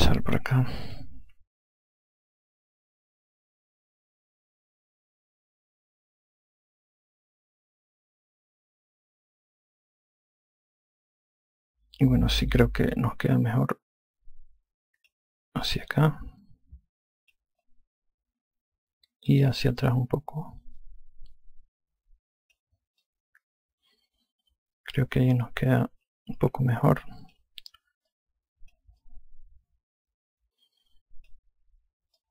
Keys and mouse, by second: 0.4 alt+click, 2.6 ctrl+z, 4.0 click, 12.5 click, 16.8 click, 18.6 click, 21.7 click, 23.9 click, 29.0 click, 29.9 alt+click.